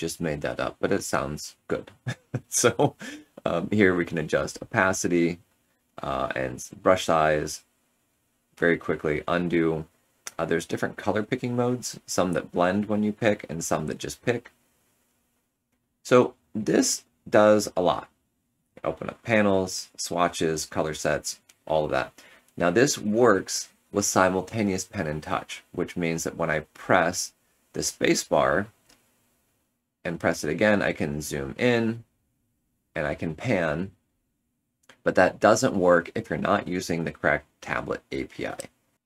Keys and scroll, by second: 8.8 ctrl+z, 10.4 x, 17.9 x, 18.5 F7, 19.4 F9, 20.0 F9, 26.0 space, 28.5 space, 28.9 z, 31.8 z, 32.2 space.